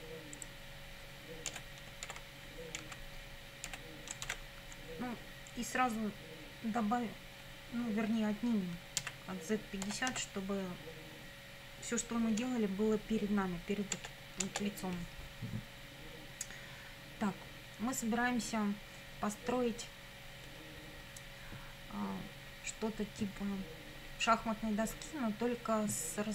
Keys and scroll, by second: 1.5 BackSpace, 2.1 shift+y, 2.8 Down, 3.7 BackSpace, 4.3 shift+z, 9.0-10.6 typing, 14.0 Return.